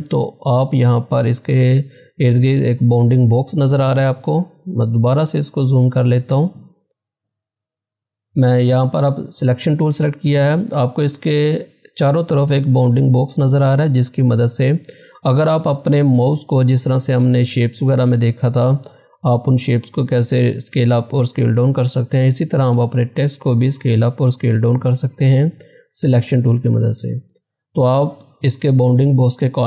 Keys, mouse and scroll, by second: 4.9 z, 5.3-7.5 drag.